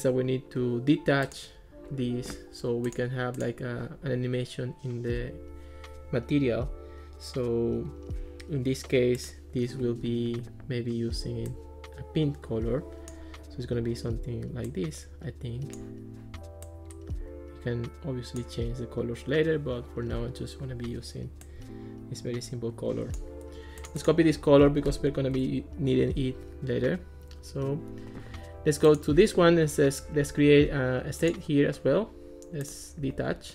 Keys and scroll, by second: 24.7 super+c, 25.3 Return.